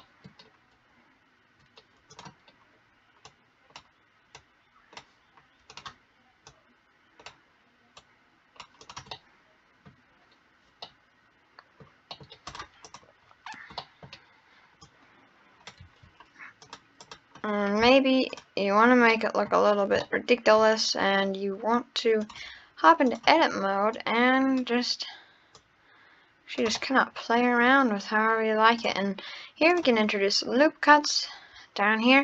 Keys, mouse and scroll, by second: 0.3 scroll down 2, 1.6-2.1 scroll up 3, 2.1 click, 2.5 scroll down 1, 3.3 click, 4.4 click, 5.7 click, 8.0 click, 8.9 click, 9.2-10.3 middle drag, 10.3-10.8 scroll down 3, 10.8 scroll up 1, 10.9-12.2 middle drag, 12.3 scroll up 3, 12.5 drag, 12.8 click, 13.8-14.8 middle drag, 14.8 click, 15.9 Tab, 16.6 click, 17.0 click, 18.3 click, 19.1 middle click, 19.7 scroll down 3, 19.9 scroll up 1, 20.1 shift+middle click, 20.8-21.2 scroll up 1, 22.2 click, 23.1 click, 24.0 click, 25.6 click, 26.8-27.9 middle drag, 28.0-28.8 scroll up 2, 28.8-32.2 drag.